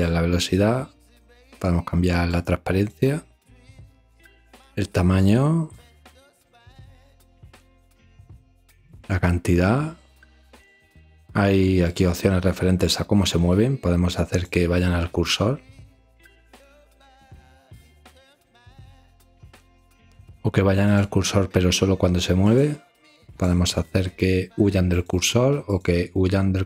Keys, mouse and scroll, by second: 0.0-1.0 drag, 2.3 click, 3.5-4.5 drag, 5.2 click, 6.5 click, 7.4 ctrl+alt+r, 8.9-9.9 drag, 10.9 ctrl+alt+r, 11.8-12.8 drag, 14.5 click, 15.1 click, 17.6 click, 18.2 click, 20.1 ctrl+alt+r, 22.6 click, 23.3 click, 24.9 click, 25.5-26.6 drag.